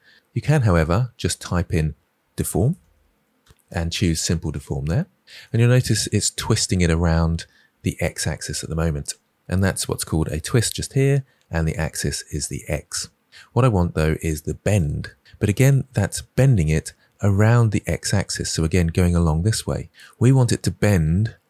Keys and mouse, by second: 14.6 click.